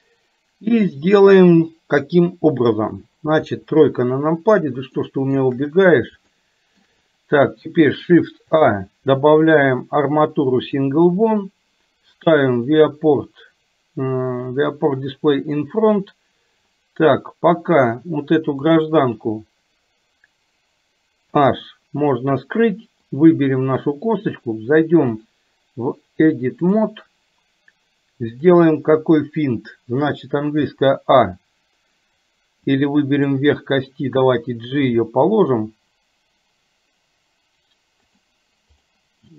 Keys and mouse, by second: 3.6 KP_3, 5.0 shift+middle click, 6.5 shift+middle click, 8.6 shift+a, 18.0 click, 23.3 click, 25.2-27.0 drag, 28.3 click, 32.7 click, 38.8 click.